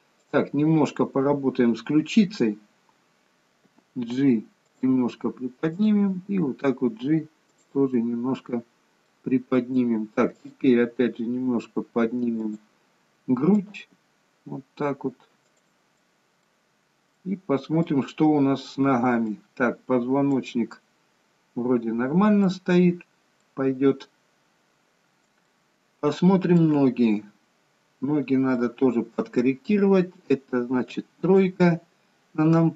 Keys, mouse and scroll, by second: 0.3 click, 5.9 click, 6.2 g, 8.1 middle click, 10.3 click, 10.9 g, 13.9 click, 15.9 middle click, 16.7-17.2 scroll down 4, 17.2 middle click, 18.4-19.1 scroll up 6, 19.4 middle click, 22.4-23.7 scroll down 1, 23.7 middle click, 23.7-25.2 scroll down 1, 25.2 scroll down 1, 25.6 shift+middle click, 27.7-28.5 scroll up 3, 30.9 middle click, 30.9 KP_3.